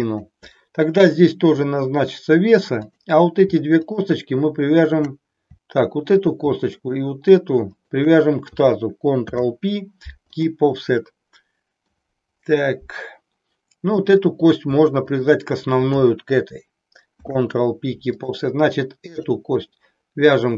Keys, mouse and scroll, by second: 3.8 shift+click, 6.8 shift+click, 9.2 ctrl+p, 13.8 click, 15.0 shift+click, 17.1 ctrl+p, 19.1 click.